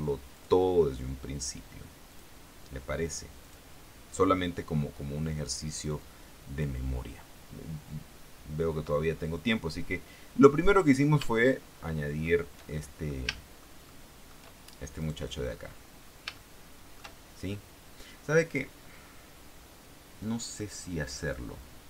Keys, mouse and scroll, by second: 0.5 click, 2.3 click, 3.6 click, 6.2 click, 11.5-12.6 shift+middle drag, 12.9 shift+middle click, 13.5 shift+middle click, 14.0 shift+middle click, 15.1 right click, 15.6-16.0 scroll up 1, 16.5 shift+middle click, 21.4 click.